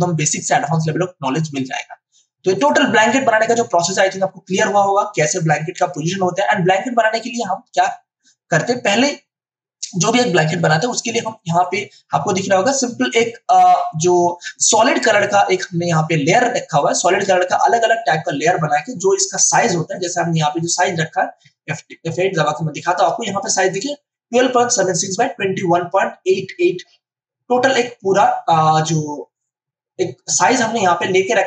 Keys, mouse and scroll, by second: 2.5 click, 11.3 click, 14.5 space, 14.7-19.3 ctrl+drag, 19.3 w, 19.9 click, 21.4 F8, 22.5-31.4 drag.